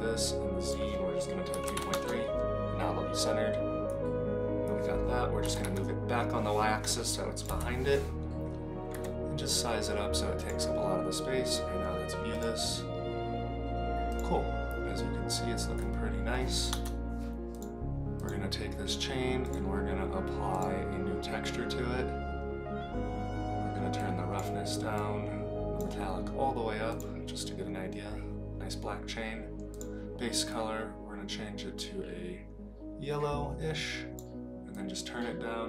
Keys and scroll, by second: 5.4 g, 7.6 KP_0, 8.9 s, 16.7 KP_0.